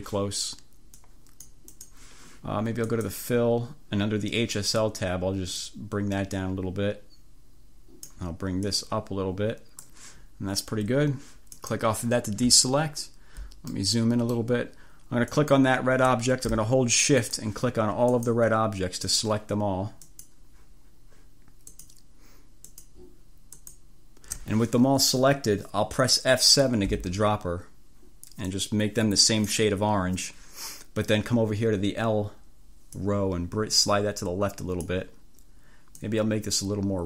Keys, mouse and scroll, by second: 1.1 click, 1.8 click, 1.9 scroll up 1, 3.1 click, 5.7-8.1 drag, 8.7-10.1 drag, 11.6 click, 12.7-13.5 scroll up 4, 13.8-14.2 ctrl+scroll up 2, 14.2 click, 15.3 click, 17.3 click, 18.3 click, 19.2 click, 20.2 click, 21.8 click, 22.7 click, 23.7 click, 27.0 F7, 28.6-29.8 drag, 33.0-35.1 drag, 36.1-37.0 drag.